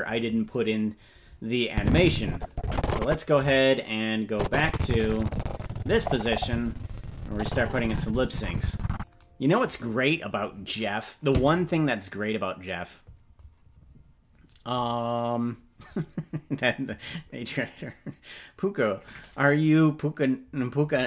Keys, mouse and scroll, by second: 1.7 click, 2.5 click, 3.3 KP_0, 4.3-9.0 drag.